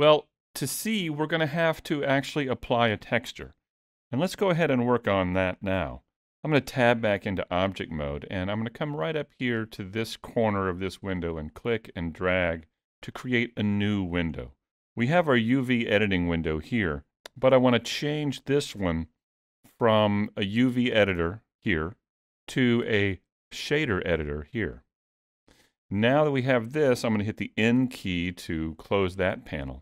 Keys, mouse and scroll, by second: 6.6 Tab, 10.5 click, 14.5 middle click, 15.6-16.4 scroll up 1, 16.4-17.0 scroll down 1, 20.1 click, 27.8 n.